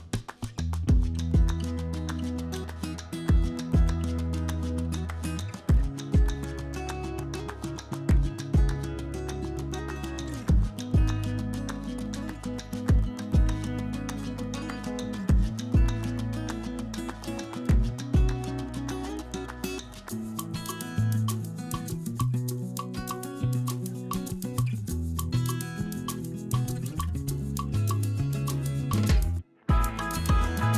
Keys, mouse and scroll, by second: 0.4 KP_7, 1.2 shift+middle click, 2.0 s, 3.8 Tab, 5.2 g, 8.2 shift+s, 12.5 alt+d, 14.1-14.8 typing, 16.2-17.1 middle drag, 17.4 middle click, 17.8 shift+middle drag, 18.4 shift+middle drag, 18.8 middle drag, 19.2 click, 19.4 Tab, 19.6 middle click, 19.9 3, 20.3 click, 20.9 shift+s, 21.6 Tab, 22.4 click, 22.6 Tab, 22.8 click, 23.4 3, 23.7 click, 24.6 i, 25.6 Tab, 26.0 middle drag, 26.4 click, 27.1 shift+a, 29.6 shift+middle drag, 30.1 r.